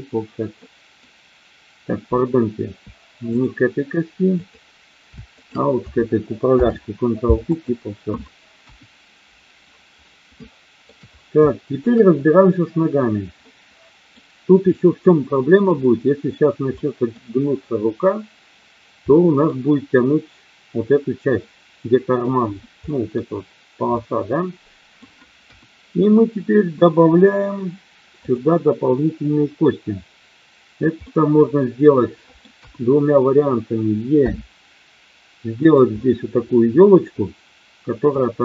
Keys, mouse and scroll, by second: 0.5 middle click, 4.3 click, 5.2 shift+click, 6.5 ctrl+p, 8.6 KP_1, 10.3 shift+middle click, 11.5 shift+middle click, 13.3 middle click, 14.7 middle click, 16.7 middle click, 19.0 middle click, 23.0 middle click, 23.8-25.0 middle drag, 25.5 KP_1, 28.1 click, 31.1-32.5 middle drag, 32.6 KP_1, 34.2 e, 35.5 click, 36.0-38.0 middle drag.